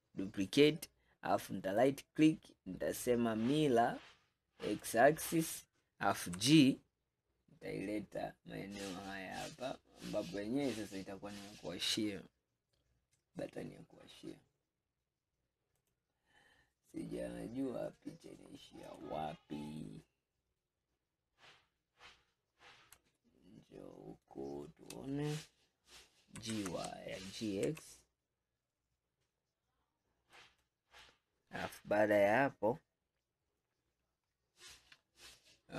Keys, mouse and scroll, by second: 1.8-5.0 right drag, 6.4 g, 18.9 click, 22.0-22.3 scroll up 2, 23.2-26.4 shift+middle drag, 26.5 g, 32.0-35.3 scroll down 2, 35.4-35.7 middle drag.